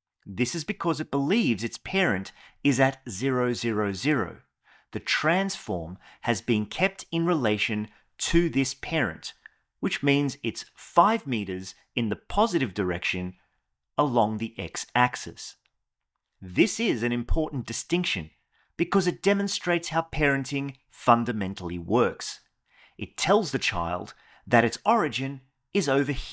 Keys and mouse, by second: 0.8 click, 4.7 click, 7.5 click, 15.6 click.